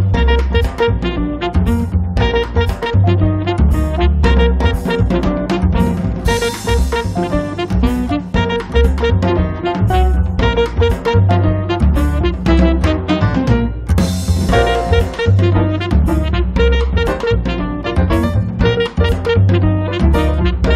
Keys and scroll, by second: 1.3 Up, 3.5 p, 4.5 1, 4.9 0, 5.0 Return, 5.5 space, 10.4 r, 15.5 e, 17.1 p, 19.2 space.